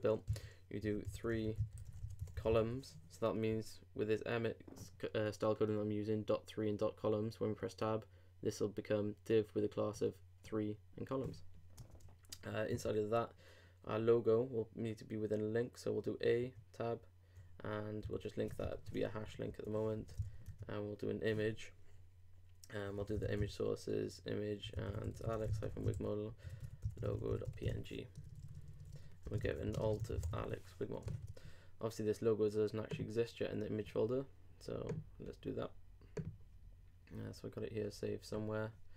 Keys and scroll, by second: 18.6 alt+BackSpace, 18.7 alt+3, 19.1 alt+Right, 29.1-30.5 typing, 31.0 super+e.